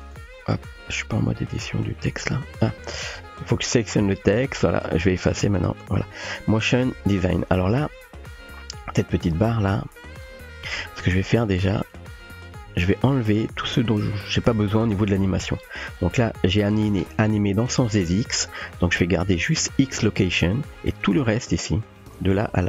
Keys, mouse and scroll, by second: 0.0 BackSpace, 0.1 BackSpace, 2.2 Tab, 3.3 click, 4.2 Tab, 4.9 BackSpace, 5.1-5.6 BackSpace, 6.0 BackSpace, 6.4 Tab, 8.1 click, 9.3-10.8 drag, 12.3 click, 15.0 shift+middle drag, 15.9 click, 19.2-20.4 typing, 19.8 click, 20.9 click, 21.7 shift+click.